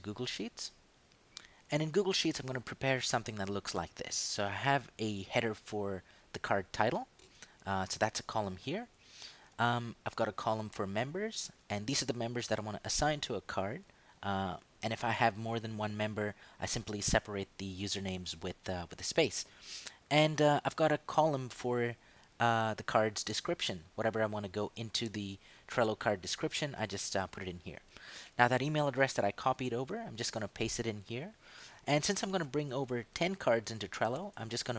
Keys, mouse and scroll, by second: 0.6 click, 6.5 click, 8.4 ctrl+Down, 8.8 ctrl+Up, 9.3 ctrl+Right, 11.5 Down, 17.4 Down, 17.9 Up, 18.2 Down, 19.8 Down, 20.0 Up, 20.9 Right, 23.7 Down, 27.7 Left, 29.4 ctrl+shift+v, 32.1 Right, 32.4 ctrl+Down, 33.0 ctrl+Left, 34.1 ctrl+shift+Up.